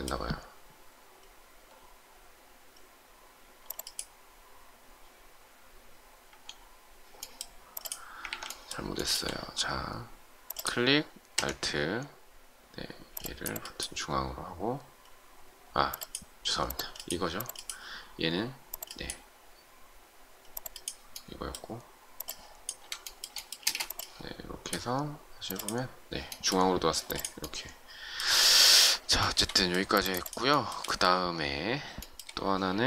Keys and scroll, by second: 8.2 ctrl+z, 23.6 shift+space.